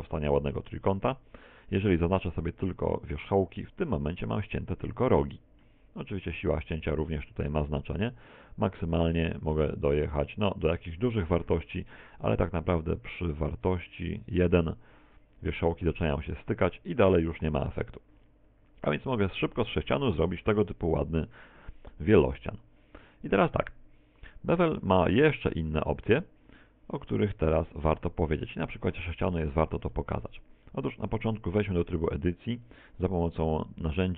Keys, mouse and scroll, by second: 3.3 click, 4.3-4.9 scroll up 2, 4.8 middle click, 6.4 click, 18.4-19.1 scroll down 5, 19.1 middle click, 21.7 middle click, 23.8 click, 26.3 click, 30.0 middle click, 30.7 middle click, 31.1 Tab, 31.8 shift+middle click, 33.2 n.